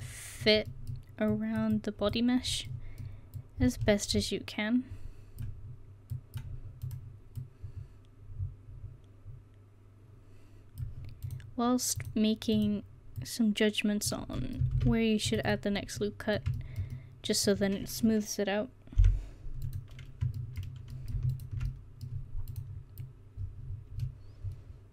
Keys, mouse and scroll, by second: 0.4 middle click, 1.1 middle click, 2.9 middle click, 6.9-8.8 right drag, 8.8-9.3 scroll up 1, 13.2-14.4 right drag, 14.8 ctrl+r, 15.5 click, 16.1-17.9 middle drag, 19.0 0, 19.7 right click, 20.4-22.5 middle drag, 23.1-24.6 middle drag, 24.6 click.